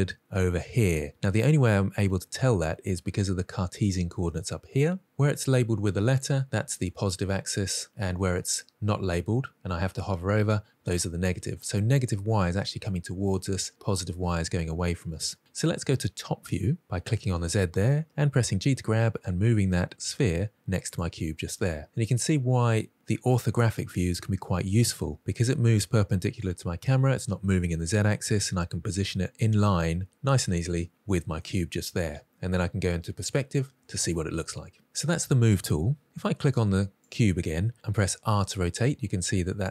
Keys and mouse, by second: 16.5 click, 18.2 g, 20.7 click, 31.4-32.5 middle drag, 37.0 click, 38.2 r.